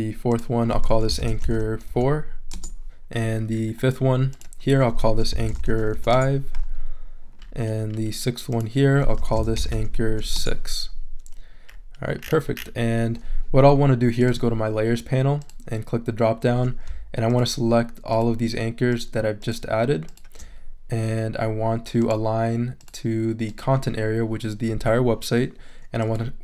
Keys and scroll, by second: 0.6-2.4 typing, 2.5 Return, 4.8-6.4 typing, 8.9-10.6 typing.